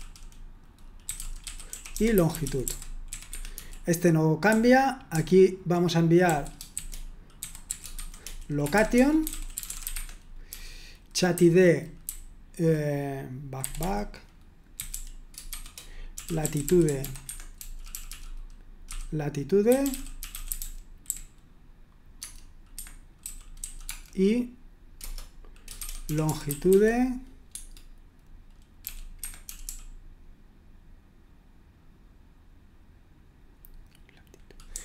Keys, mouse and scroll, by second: 0.0-5.1 typing, 6.3-12.0 typing, 13.6-21.0 typing, 22.2 Tab, 22.7 Escape, 23.2-24.1 typing, 25.0 Return, 25.8-26.8 typing, 27.5 Tab, 28.8-29.6 typing, 29.2 Escape, 34.7-34.8 typing.